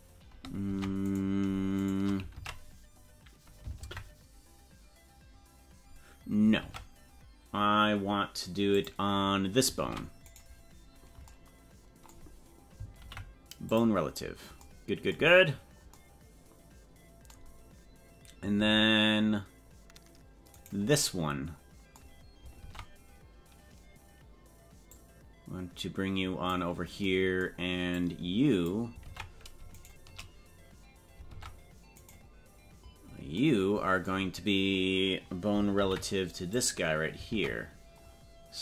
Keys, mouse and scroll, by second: 0.7 ctrl+Tab, 1.1 right click, 1.8 shift+right click, 2.3 ctrl+Tab, 3.7 ctrl+Tab, 6.6 ctrl+Tab, 8.8 click, 9.8 ctrl+Tab, 10.3 right click, 13.0 ctrl+p, 15.4-15.7 scroll down 5, 18.6 ctrl+Tab, 20.7 right click, 22.7 ctrl+Tab, 24.9-26.5 drag, 27.9 click, 29.0 ctrl+Tab, 29.8 shift+right click, 31.3 ctrl+Tab, 32.1 right click, 35.9 ctrl+p, 37.3 ctrl+Tab.